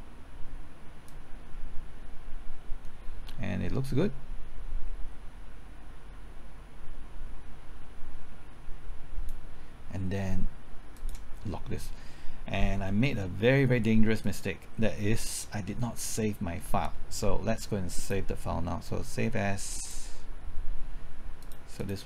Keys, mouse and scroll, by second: 1.1-9.3 drag, 12.6-13.7 scroll down 1, 14.2-15.7 drag, 15.7 middle click, 16.1-16.5 scroll down 1, 16.5 scroll up 1, 18.0 click.